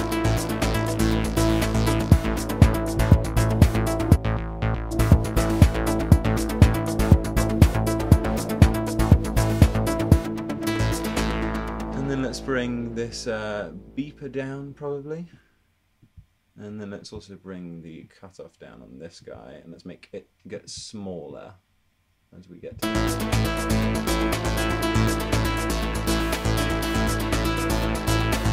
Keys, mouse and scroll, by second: 10.2 space, 10.6 space, 11.2 space, 17.6 alt+double click, 17.8 super+click, 19.3 alt+click, 20.8 alt+click, 20.9 alt+double click, 22.7 alt+click.